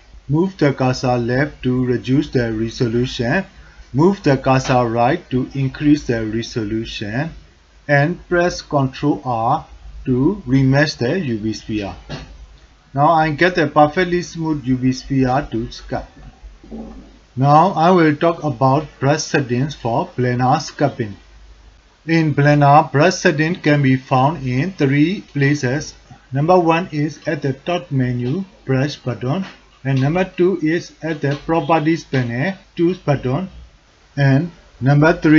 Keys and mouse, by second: 8.1 ctrl+r, 11.8 middle click, 14.9 shift+middle drag, 15.2 shift+middle click, 26.9-29.7 drag, 32.8 click.